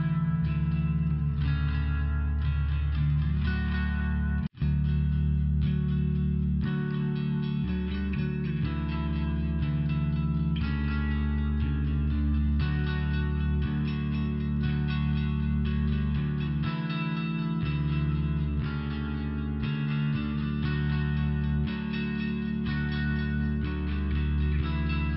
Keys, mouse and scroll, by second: 1.4 click, 4.4 click, 4.5 click, 4.7 click, 4.9 click, 5.0 click, 5.2 click, 5.4 click, 7.7 click, 8.0 click, 8.1 click, 8.3 click, 8.4 click, 9.0 click, 9.1 click, 9.4 click, 10.3 click, 11.0 click, 15.3 click, 16.1 click, 17.1 click, 18.2 click, 19.4 click, 20.1 click, 23.8 click, 24.8 click.